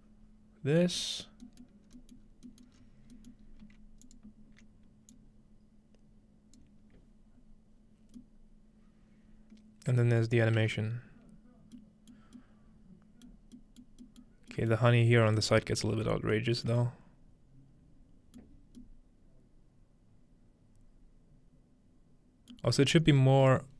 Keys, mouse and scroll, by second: 1.8-5.8 middle drag, 1.8 scroll down 2, 1.9 scroll up 2, 5.8-7.8 alt+drag, 12.1 middle click, 15.8-17.9 scroll up 1, 16.4 shift+middle drag, 16.7 shift+middle click, 19.8-20.6 scroll down 1, 22.5 middle drag, 22.8 shift+middle click, 23.2-23.7 scroll up 1, 23.2 shift+middle click.